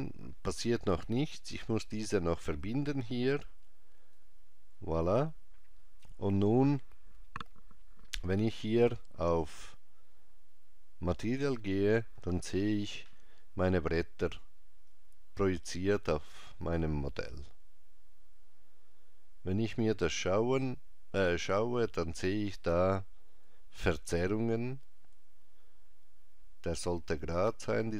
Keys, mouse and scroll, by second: 2.6 click, 9.4 click, 14.8 click.